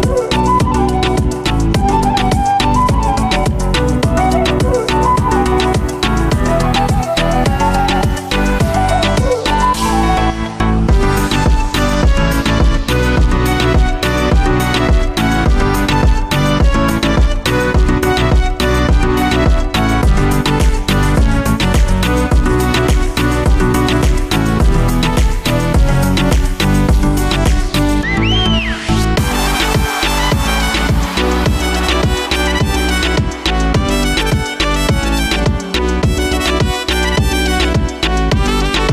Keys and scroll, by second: 13.7 ctrl+End, 25.6 ctrl+z.